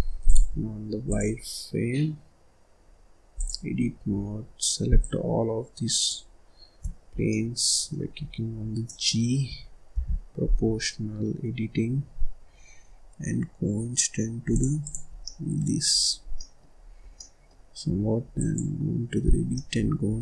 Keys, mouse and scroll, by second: 0.2 click, 1.0-3.9 drag, 3.9-5.0 scroll up 2, 5.0 shift+click, 7.1 scroll down 1, 7.3 middle click, 8.1-8.8 scroll up 4, 8.8-9.9 middle drag, 9.9 g, 14.8 click, 15.1 scroll down 1, 15.2 middle click, 15.9-16.2 scroll up 1, 16.2 scroll down 1, 16.3 middle click, 16.6-17.0 scroll up 2, 17.0 scroll down 1, 17.1-18.3 middle drag, 18.3 click, 19.2 scroll up 1, 19.4 scroll down 1, 19.5 middle click, 20.1-20.2 scroll up 1.